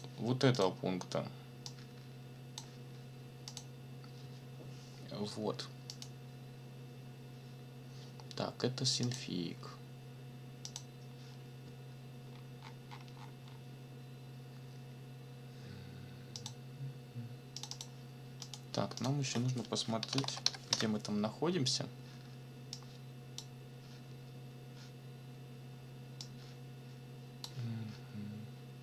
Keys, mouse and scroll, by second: 0.5 click, 1.6 click, 3.5 click, 5.9 click, 9.0 click, 10.6 click, 12.2-13.7 scroll down 3, 16.3 click, 17.6 click, 18.4 click, 19.8-20.8 typing, 22.7 click, 26.2-27.6 drag.